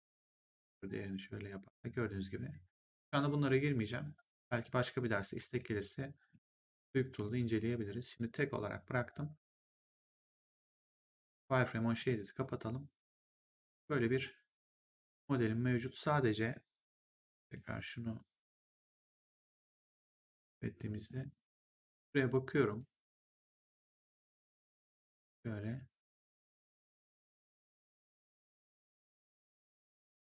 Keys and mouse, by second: 0.6 click, 4.3 click, 7.2 click, 8.3 click, 11.9 click, 17.3 click, 19.4 right click, 22.6 click, 26.8 click.